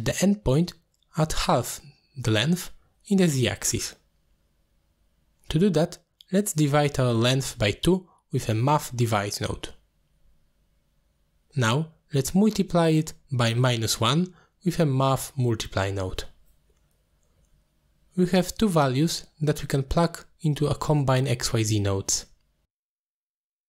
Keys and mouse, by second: 4.0 middle click, 5.2 middle click, 5.6 click, 6.8-8.6 drag, 9.1 click, 10.7 click, 11.4 click, 12.1-13.6 drag, 14.1 click, 15.5 click, 16.1-16.4 shift+drag, 17.0 g, 17.5 click, 17.9 ctrl+z, 19.0 middle click, 20.4-22.2 drag, 22.9-23.6 drag.